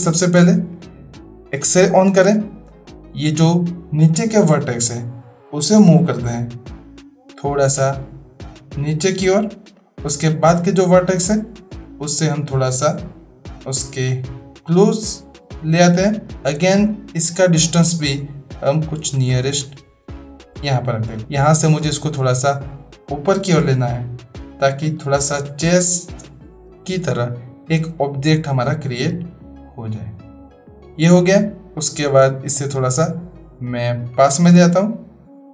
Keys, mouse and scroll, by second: 0.3-0.8 drag, 1.9 click, 2.8 click, 7.1-9.9 drag, 10.3-10.8 drag, 12.0-16.3 drag, 16.3 drag, 17.5-21.2 drag, 21.8-24.9 drag, 26.8 click, 28.1-30.9 drag, 31.3 click, 32.8-35.5 drag.